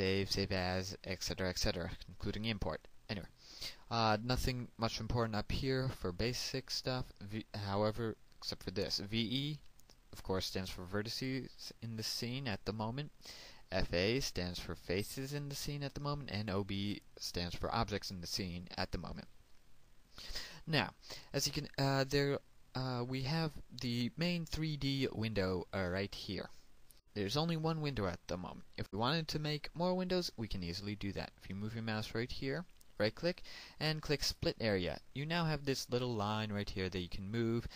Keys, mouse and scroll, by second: 33.1 right click, 34.5 click.